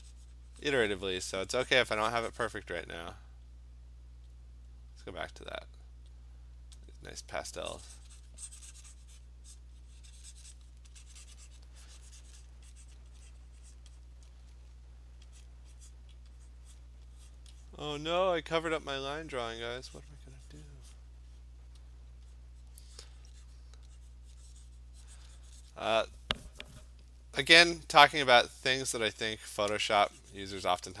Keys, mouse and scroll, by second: 0.3 click, 0.4 click, 0.6 click, 0.9 click, 1.7 click, 2.6 click, 4.4 click, 6.3 click, 6.9 click, 7.9 click, 8.1 click, 8.3 click, 9.6 click, 10.6 click, 12.5 click, 13.0 click, 13.8 click, 14.0 click, 15.5 click, 16.0 click, 16.8 click, 17.4 click, 17.7 click, 18.1 click, 18.4 click, 19.2 click, 19.7 click, 20.1 click, 20.3 click, 20.8 click, 21.0 click, 22.4 click, 22.8 click, 23.1 click, 23.6 click, 24.6 click, 24.9 click, 25.3 click, 25.4 click, 25.7 click, 26.0 click, 28.4 click, 28.8 click, 29.1 click, 29.4 click, 29.8 click, 30.7 click.